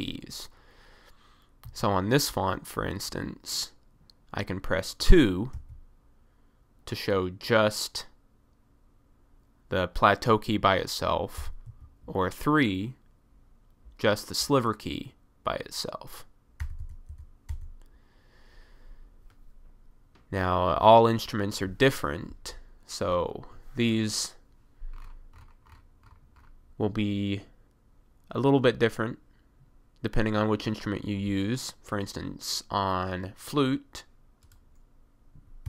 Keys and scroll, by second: 1.7 1, 5.6 2, 11.4 BackSpace, 16.7 BackSpace, 16.9 BackSpace.